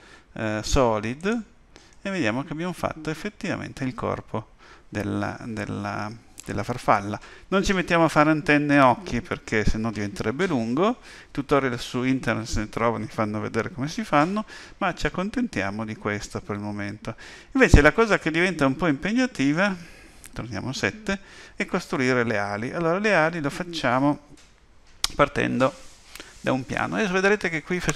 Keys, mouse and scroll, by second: 1.9 middle click, 14.6 middle click, 20.3 KP_7.